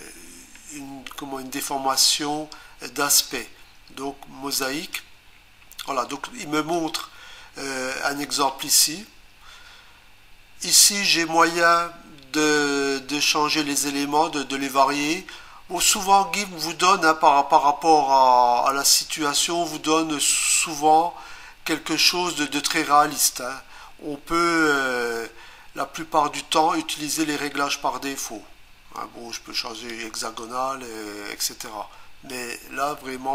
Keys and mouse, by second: 4.6 click, 6.8 click, 29.8 click, 30.4 click.